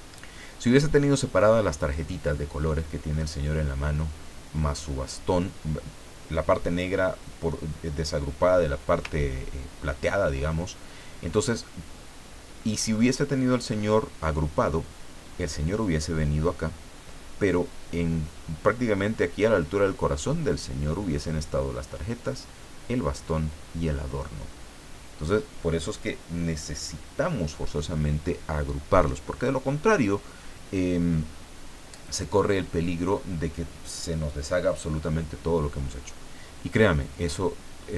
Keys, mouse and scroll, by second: 9.4 ctrl+scroll down 2, 10.0-10.3 ctrl+scroll down 2.